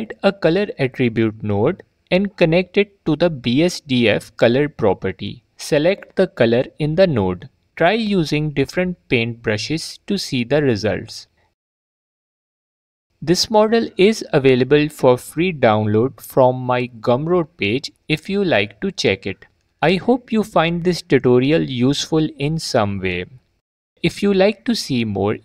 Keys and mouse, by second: 7.5 ctrl+z, 10.8 g, 11.0 click, 11.0 f, 12.9 middle click, 13.1 ctrl+z, 13.5 ctrl+z, 13.6 ctrl+z, 13.7 ctrl+z, 14.1 Tab.